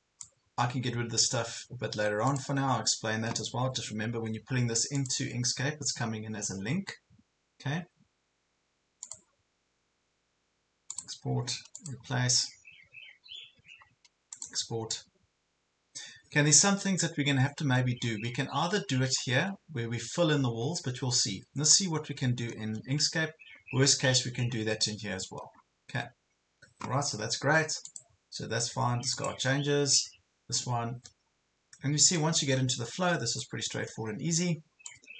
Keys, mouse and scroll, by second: 17.7-18.2 ctrl+scroll up 2, 18.8 ctrl+scroll down 1, 20.3 ctrl+scroll down 1, 21.1 ctrl+scroll up 1, 21.7 ctrl+scroll down 1, 22.5 ctrl+scroll down 1, 24.7 ctrl+scroll down 1, 27.9 click, 32.2 click, 33.7 ctrl+scroll up 1, 34.9-35.1 drag.